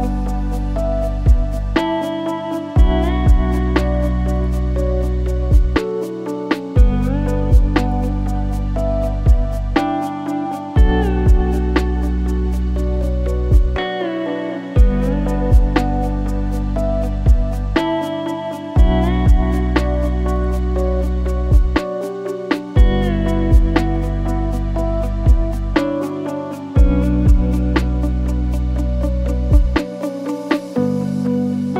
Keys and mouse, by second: 0.5 click, 1.4-2.9 drag, 4.6 click, 5.2 click, 5.4-8.5 drag, 8.6-9.6 drag, 9.9 middle click, 10.8-12.2 drag, 13.1 middle click, 14.1-14.5 drag, 15.3 click, 15.5 space, 17.4 click, 18.5-19.0 drag, 20.0 click, 22.8-23.9 drag, 24.7 click, 26.0 click, 28.8 middle click, 29.3 middle click, 30.4 click.